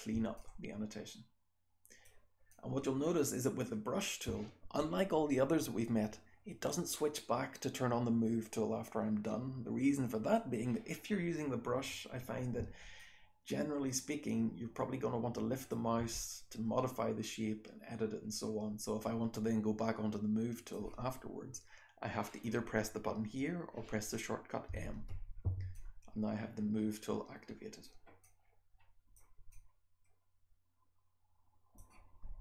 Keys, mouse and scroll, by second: 0.3-2.0 alt+drag, 2.4-3.9 alt+drag, 12.9-15.6 alt+drag, 16.3-20.6 drag, 24.6 m, 25.7-27.7 drag, 28.1-29.0 drag, 29.4-31.7 drag, 29.4-30.2 scroll down 1, 30.2-31.5 scroll down 1, 31.5-32.4 scroll down 1.